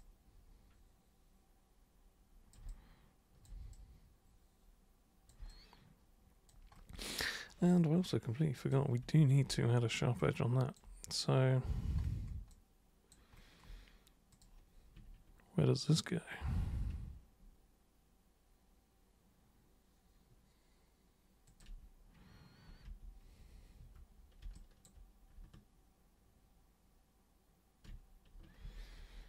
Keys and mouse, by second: 2.6 alt+super+click, 3.7-5.3 super+drag, 5.5-6.5 alt+super+drag, 8.6 super+click, 9.0 super+1, 10.2 alt+super+click, 12.5 alt+super+click, 14.3 super+click, 21.5 ctrl+super+click, 22.8 super+3, 23.8 super+1, 24.5 alt+super+click, 28.6 ctrl+super+z, 29.0 ctrl+super+z.